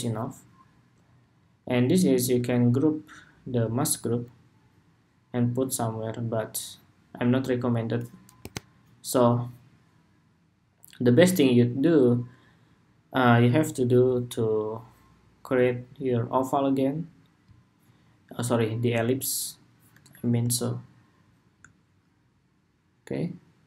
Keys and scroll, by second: 3.4 super+d.